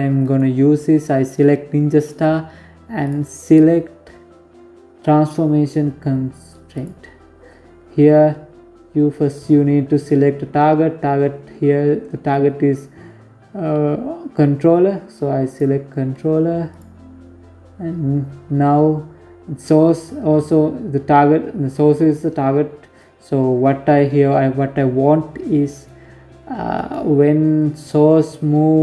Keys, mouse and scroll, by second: 1.7 click, 6.5 scroll down 1, 6.8-9.6 scroll up 3, 14.1 click, 17.1 scroll down 1, 25.4 right click.